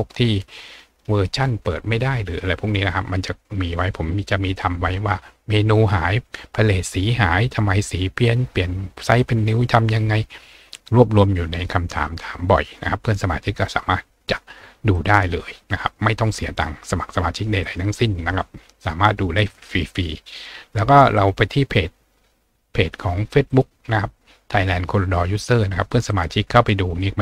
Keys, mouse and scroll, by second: 0.0-0.6 scroll down 2, 2.3-3.0 scroll up 4, 3.2-4.1 scroll up 2, 4.9 scroll up 2, 8.0-8.3 scroll up 2, 14.9 click, 17.6 click, 19.4 click, 21.2 click, 23.5 click, 26.1 click.